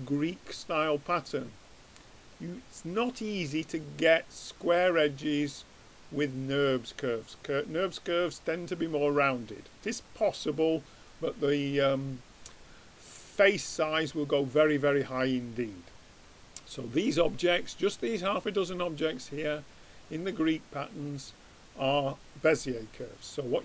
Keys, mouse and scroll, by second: 5.5-7.1 drag, 9.8-11.5 drag, 17.8-23.1 middle drag.